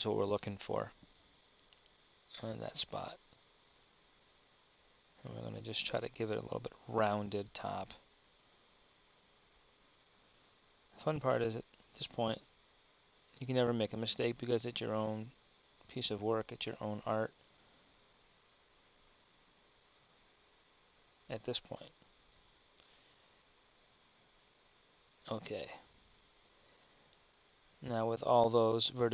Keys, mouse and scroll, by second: 4.7-8.3 drag, 10.0 e, 11.3-13.9 drag, 16.8 s, 22.1-24.7 drag, 22.6 s, 25.6-26.9 drag, 27.7-29.1 middle drag.